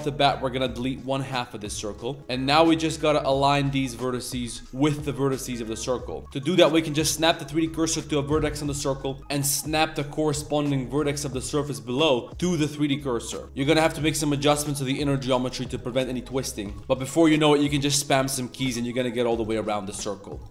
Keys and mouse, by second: 2.3 shift+s, 2.9 click, 3.5 s, 5.0 shift+click, 5.8 click, 6.2 ctrl+z, 6.2 shift+s, 6.4 click, 6.8 shift+s, 8.0 z, 13.4 ctrl+z, 13.4 g, 13.6 click, 13.8 g, 15.7 click, 16.4 click, 16.6 shift+s, 16.8 ctrl+z, 18.0-20.5 drag.